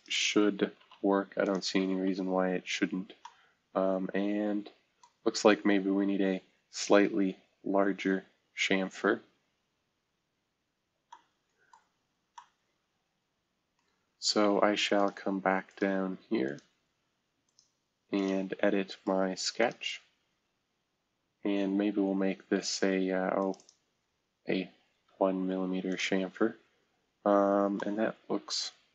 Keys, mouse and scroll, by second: 0.8 space, 1.8-3.5 scroll up 3, 3.2 middle click, 5.0 middle click, 5.1-5.6 scroll down 2, 6.3-7.1 scroll up 1, 7.1 scroll down 1, 7.5-8.5 scroll up 2, 9.1 scroll down 2, 9.7 scroll down 2, 10.3-11.1 scroll up 2, 11.7 scroll down 1, 13.8 middle click, 21.0-21.4 scroll down 1, 21.4-23.1 scroll up 1, 24.9 1, 27.7-28.9 middle drag.